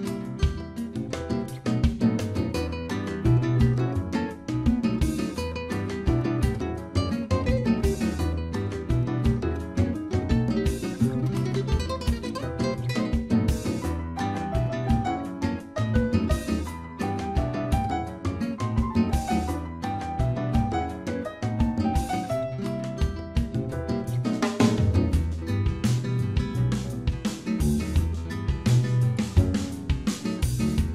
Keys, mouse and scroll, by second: 1.5-2.0 scroll down 2, 3.5 click, 6.5 middle click, 6.8 scroll up 4, 7.1 shift+middle click, 7.5 scroll up 2, 8.0 middle click, 12.3 click, 14.6-15.2 scroll down 4, 16.1 right click, 16.1-17.1 scroll down 2, 17.6 scroll up 3, 18.3 middle click, 18.3-19.1 scroll up 1, 20.2 click, 22.6 middle click, 26.6-27.1 scroll down 7, 28.9 click.